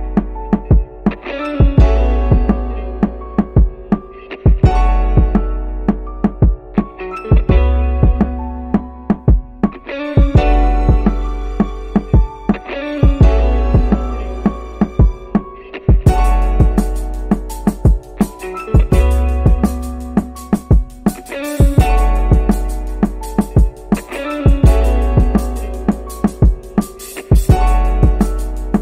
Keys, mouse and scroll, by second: 4.2 click, 10.7 click, 11.5 click, 12.7 click, 12.8 click, 17.2-19.3 ctrl+drag, 23.1 g.